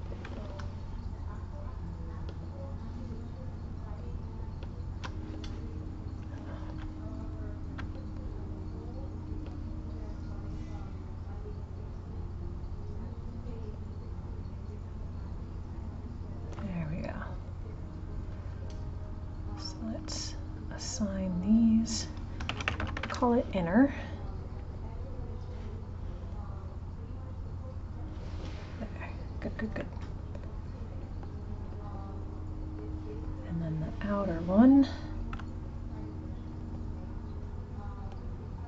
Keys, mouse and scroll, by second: 2.0 shift+click, 3.3 shift+click, 6.2 click, 7.2 click, 9.2 ctrl+click, 11.5 ctrl+click, 13.2 ctrl+click, 14.7 ctrl+click, 17.6-21.6 drag, 21.7-22.7 drag, 22.7 n, 26.8-29.8 drag, 29.8-32.8 middle drag, 33.8 click, 36.4 ctrl+click, 37.9 ctrl+click.